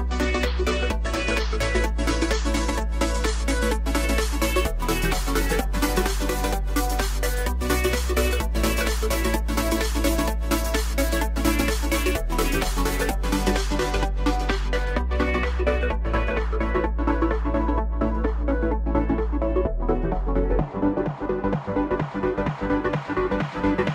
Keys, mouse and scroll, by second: 0.9 KP_1, 2.2 click, 5.3 s, 7.1 s, 13.3 KP_3, 15.0 s, 17.9 scroll up 2, 18.3-18.8 shift+middle drag, 18.8 scroll up 2, 20.2 click, 20.5 scroll down 3, 20.8-21.6 middle drag, 21.6 click, 22.2 click, 22.8 KP_7.